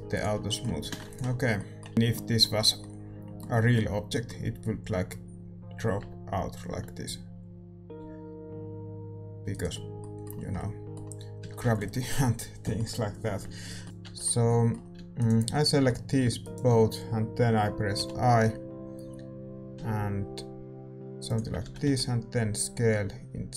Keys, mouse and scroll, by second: 0.4-5.9 middle drag, 0.8 a, 1.3 ctrl+s, 1.9-5.9 right drag, 5.9 r, 9.7 scroll down 1, 9.9-17.9 middle drag, 11.4 a, 11.9 ctrl+s, 13.8 ctrl+z, 13.8-19.3 right drag, 14.0 Tab, 14.9 a, 17.9 i.